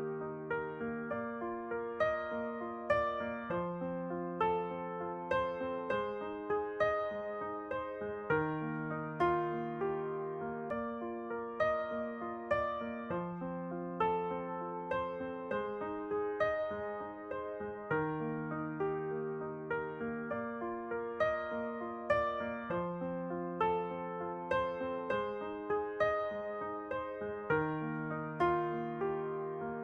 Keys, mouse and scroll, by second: 0.9-5.7 right drag, 1.2 Tab, 1.5-4.0 middle drag, 4.4 shift+space, 5.3 t, 6.8-8.7 drag, 9.0-11.0 drag, 10.7-12.6 middle drag, 11.2 s, 14.8-17.5 drag, 18.8-20.3 drag, 20.1 ctrl+r, 21.3 ctrl+r, 22.7-24.6 right drag, 23.9-29.8 drag.